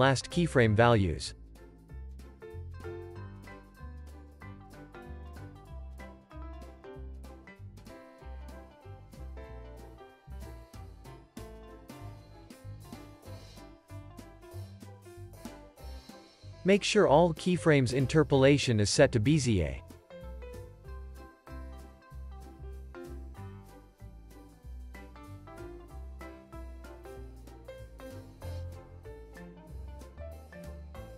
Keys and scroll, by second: 0.1 alt+shift+w, 2.1 alt+shift+w, 3.3 x, 5.1 alt+shift+s, 6.2 z, 6.9 x, 8.5 z, 9.6 x, 10.9 z, 20.3 x, 25.1 super+s.